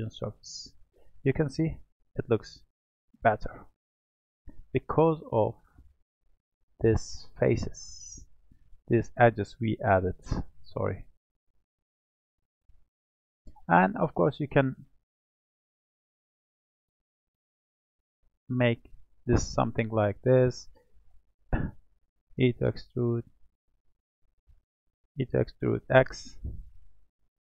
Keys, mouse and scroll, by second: 0.3-2.0 middle drag, 2.0-2.7 drag, 2.7-3.8 middle drag, 3.8-4.4 scroll up 2, 4.9 Tab, 5.6-10.9 middle drag, 11.2 click, 11.9-12.9 middle drag, 12.9-15.1 scroll down 1, 16.4 click, 18.0 click, 19.2 i, 22.4 i, 25.1 e.